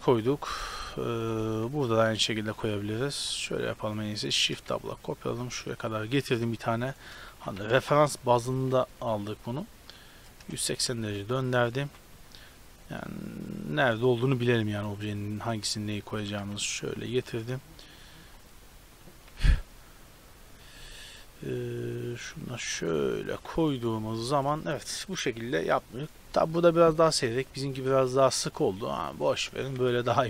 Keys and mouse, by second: 2.0 KP_7, 2.4 z, 4.4 shift+d, 7.4 g, 8.5 r, 11.1 y, 11.6 f, 11.8 y, 16.3 shift+d, 18.0-19.2 typing, 21.1 click, 22.7 z, 23.1 middle click, 23.3 a, 26.7-29.3 middle drag, 29.5-30.2 middle drag.